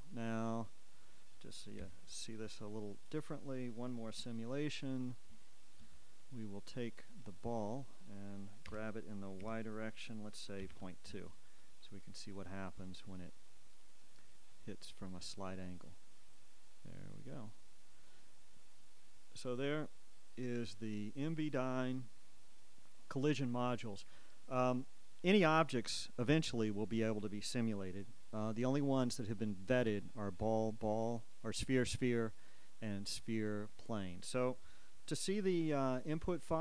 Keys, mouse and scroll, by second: 0.1 Escape, 2.0 KP_7, 3.8-5.1 scroll up 2, 5.1-5.7 shift+scroll up 1, 5.7-8.7 shift+middle drag, 6.8 z, 8.8-11.4 typing, 14.8 click, 17.4-18.3 scroll down 3, 30.1 Escape, 36.5 click.